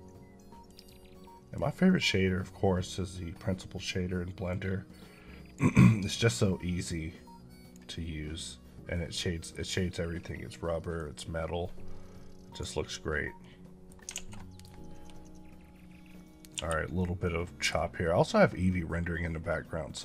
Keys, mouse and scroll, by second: 0.8 click, 4.4 click, 6.4 click, 8.8 middle click, 10.8-12.7 drag, 13.3 middle click, 16.4 l, 16.8 middle click.